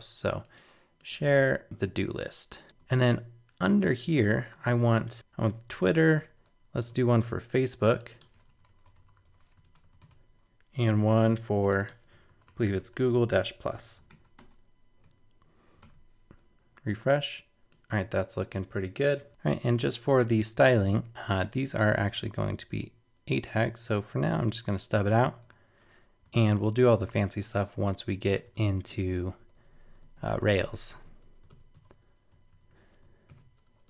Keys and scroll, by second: 1.3 super+v, 5.1 super+z, 6.9 super+v, 9.6 super+Return, 10.0 super+v, 14.1 super+s, 14.4 super+Tab, 15.8 super+r, 19.3 super+BackSpace, 26.4 super+Right, 27.3 alt+super+., 28.5 super+Left, 30.9 super+c, 31.5 super+Left, 31.7 super+v, 32.3 super+Right, 33.3 alt+super+..